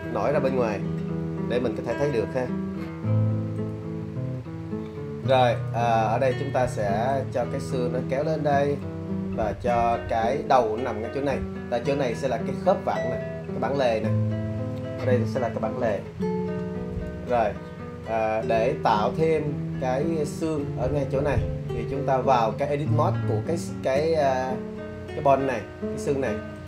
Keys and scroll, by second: 2.7 `.